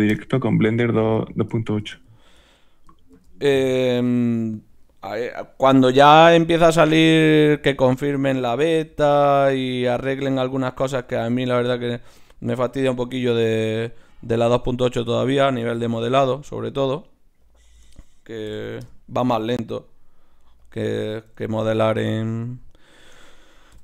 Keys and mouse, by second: 1.3-3.7 right drag, 2.0-3.4 drag, 3.1 shift+d, 3.7-4.9 drag, 3.8-6.4 right drag, 5.7 g, 6.6 right click, 7.0-10.5 drag, 7.2 g, 8.9 g, 10.0 g, 10.9-15.8 drag, 11.0 g, 12.6 g, 14.6-15.6 right drag, 15.8 right click, 16.0 click, 16.1-23.8 right drag, 20.2-21.3 drag.